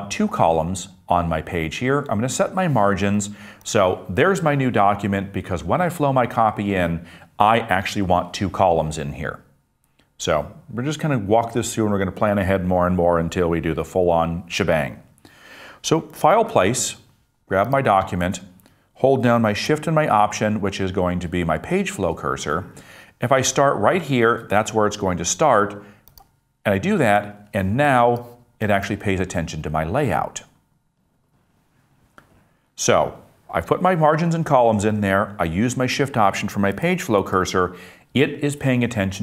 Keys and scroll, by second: 16.3 super+d, 18.3 Return, 36.8 super+z.